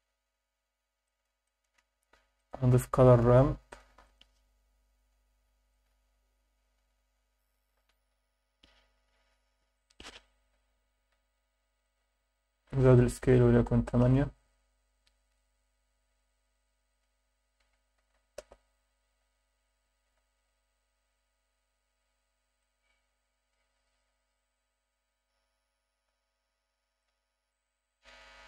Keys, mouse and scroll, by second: 1.0 shift+middle click, 1.5 shift+middle click, 2.0 shift+a, 5.7-6.8 drag, 8.0-10.2 drag, 11.8-14.0 drag, 15.2 scroll down 2, 15.8 scroll down 2, 16.9-18.4 drag, 18.1 0, 19.1 scroll up 2, 19.6-20.1 alt+shift+middle drag, 20.4 scroll up 2, 22.6-24.6 drag, 27.0 click.